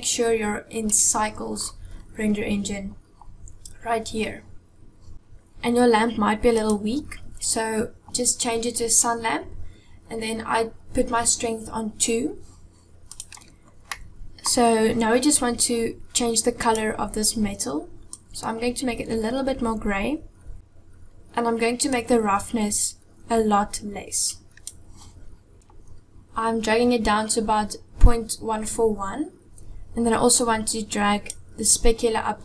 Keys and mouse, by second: 0.8 click, 6.4 click, 12.9 click, 13.9 middle click, 16.4 click, 21.8-24.7 drag, 30.0-31.2 drag.